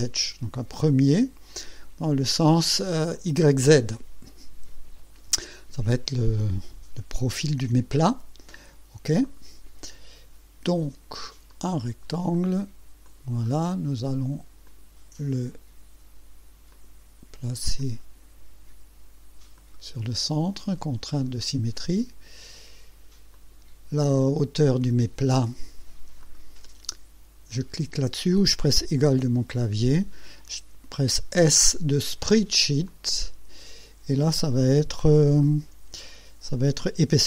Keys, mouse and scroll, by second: 0.8 click, 3.1 click, 9.2 click, 11.5 click, 12.3 click, 13.0 click, 13.5 right click, 14.7 click, 16.7 click, 17.8 click, 19.6 click, 23.3 click, 26.2 click, 29.1 =, 31.4 s, 32.9 click.